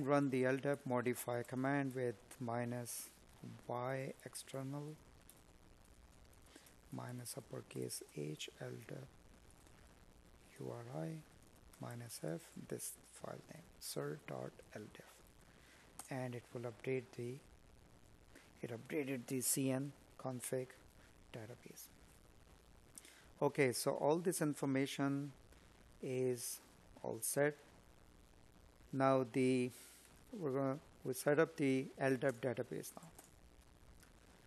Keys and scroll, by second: 2.7 space, 3.4 space, 27.2 space.